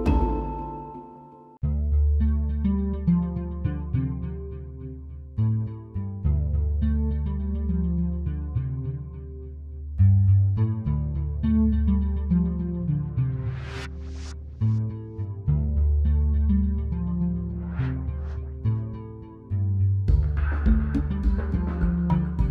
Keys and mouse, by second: 0.2-2.7 typing, 4.0 z, 4.4 z, 4.6 KP_1, 5.9-7.8 typing, 7.0 click, 9.1 a, 9.1 KP_3, 13.1 ctrl+z, 13.3 ctrl+z, 17.6 l, 19.0 a, 19.4-20.5 drag, 21.5 click.